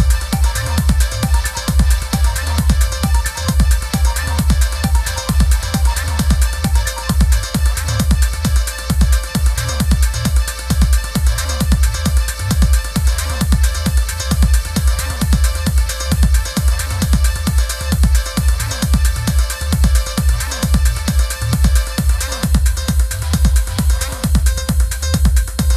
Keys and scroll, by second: 2.9 v, 5.3 a, 14.8 v, 21.8 a.